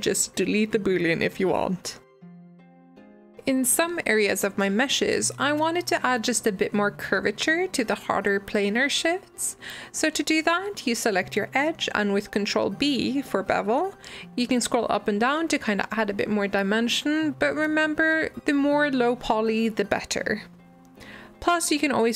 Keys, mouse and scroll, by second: 0.9 Delete, 1.5-2.4 middle drag, 2.8 click, 3.2 click, 3.8 e, 5.7 g, 7.1-9.1 middle drag, 10.1 click, 10.3 middle click, 10.9 click, 11.0 middle click, 12.0 shift+click, 12.3 middle click, 12.7 ctrl+b, 19.0 Tab, 19.2-22.1 middle drag.